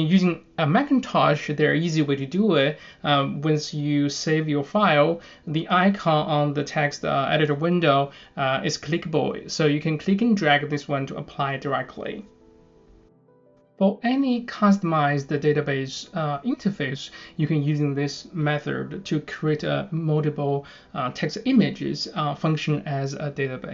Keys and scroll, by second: 7.8-14.1 typing, 9.3 Return, 15.0 super+a, 15.9 super+c.